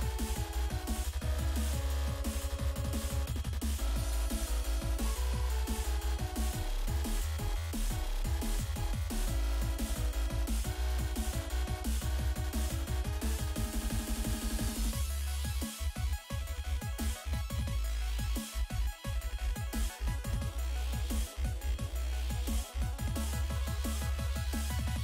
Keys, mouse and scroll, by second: 0.7 click, 0.9 click, 3.4 click, 4.2 click, 5.3 click, 6.1 click, 6.8-8.5 typing, 9.2 Return, 11.3 F5, 12.7-17.4 typing, 19.7 click, 21.3 click, 22.1 click, 22.9 click, 23.0 click, 23.3 double click, 24.0 scroll down 1, 24.8 click.